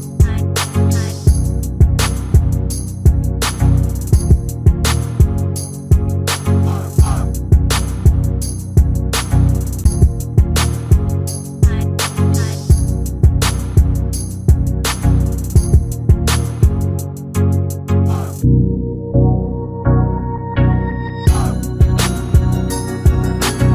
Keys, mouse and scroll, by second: 0.1 shift+middle click, 0.1-3.1 typing, 4.2 s, 4.5 click, 4.5 g, 4.9 click, 4.9 right click, 5.9 click, 6.2-14.2 typing, 6.8 shift+middle click, 10.6 scroll up 3, 10.9 shift+middle click, 11.0 click, 12.1 click, 12.4 click, 12.6 click, 14.3-15.0 scroll down 7, 14.4 shift+middle click, 14.6 shift+middle click, 14.7 shift+middle click, 14.8 shift+middle click, 15.0 shift+middle click, 15.2-15.7 scroll up 3, 16.1-16.4 scroll down 4, 16.3 click, 16.4 middle click, 16.7 a, 17.6 x, 17.8 click, 18.3 click, 18.4 click, 18.6 a, 19.1 scroll up 3, 19.3 middle click, 19.3 scroll down 3, 19.5 shift+middle click, 19.7-22.2 typing, 20.0 alt+click, 20.7 click, 21.1 scroll down 1, 21.3 click, 22.1 middle click, 22.8 click, 23.2 shift+middle click, 23.2 scroll up 2, 23.4 scroll down 2, 23.5 shift+middle click, 23.6 middle click.